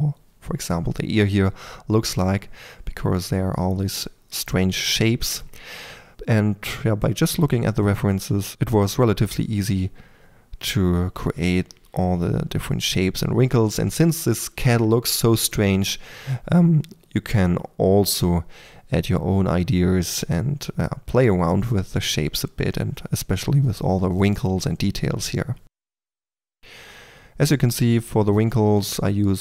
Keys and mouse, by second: 0.0-4.9 typing, 0.4 click, 0.7-1.0 drag, 1.2 click, 1.4 middle drag, 2.0 middle click, 3.0 click, 4.5 click, 5.0 click, 6.1 click, 6.4 f, 6.6 click, 7.3-7.8 drag, 8.0-23.4 typing, 8.5 click, 8.8 click, 9.4 click, 10.7 click, 11.5-11.8 drag, 12.2 click, 13.2 drag, 15.2 click, 16.4 click, 18.0 drag, 18.3-18.7 drag, 18.9 click, 19.6 click, 20.3 click, 20.5 click, 21.4 click, 22.1 click, 22.5 drag, 23.0 click, 23.8 click, 24.8-27.7 typing, 25.6 click, 26.2 click, 26.8 click, 28.6 click, 29.2 f.